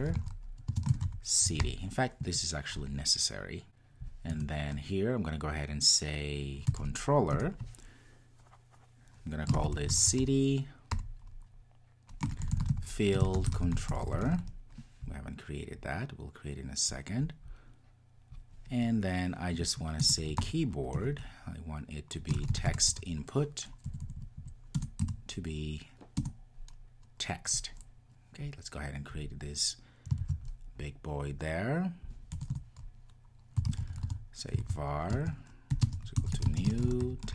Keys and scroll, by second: 7.3 Return, 21.0 Return, 30.2 super+c, 34.6 super+v.